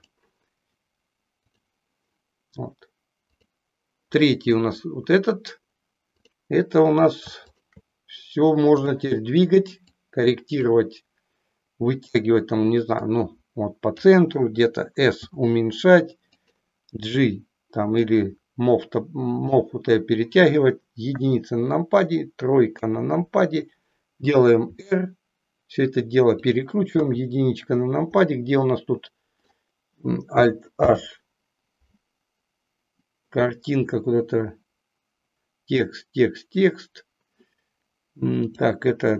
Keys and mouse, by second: 3.2 click, 6.1 click, 7.5 shift+click, 8.7 click, 9.8 click, 13.0-14.1 drag, 15.2 s, 16.3 click, 17.8-19.6 drag, 21.1 KP_1, 22.7 KP_3, 24.7 r, 27.0 KP_1, 28.3-29.5 middle drag, 30.7 alt+h, 38.5 click.